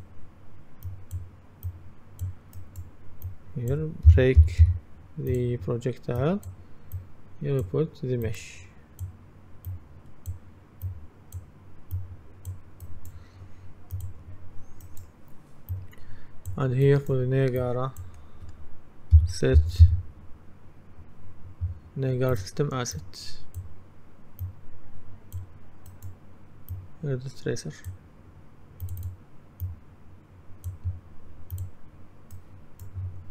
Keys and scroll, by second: 3.9-5.2 typing, 19.2-19.6 typing.